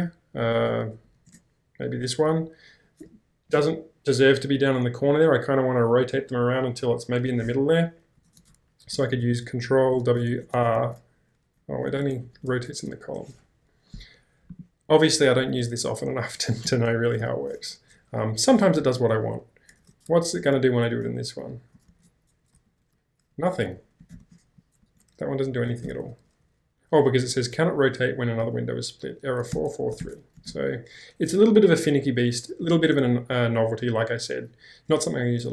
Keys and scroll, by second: 0.4 k, 0.6 k, 0.7 k, 1.0 k, 1.3 Return, 8.3 ctrl+w, 8.9 shift+r, 10.2 BackSpace, 10.4 ctrl+w, 10.8 shift+r, 11.7 ctrl+w, 12.3 r, 16.7 ctrl+h, 17.5 BackSpace, 18.8 ctrl+l, 19.8 ctrl+w, 20.4 r, 21.9 ctrl+w, 22.7 r, 24.2 ctrl+w, 24.8 r, 25.8 ctrl+l, 29.5 ctrl+h, 30.4 space, 30.7 q.